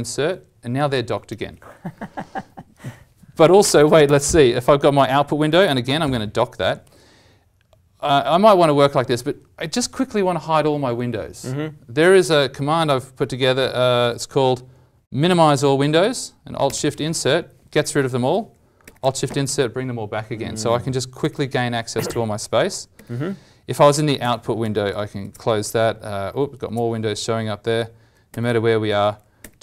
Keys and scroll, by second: 4.0 ctrl+alt+o, 5.6 ctrl+Insert, 13.9 alt+w, 18.9 alt+shift+Insert, 21.2 alt+shift+Insert, 22.9 alt+shift+Insert, 24.2 ctrl+alt+o, 28.3 alt+shift+Insert, 29.4 alt+shift+Insert.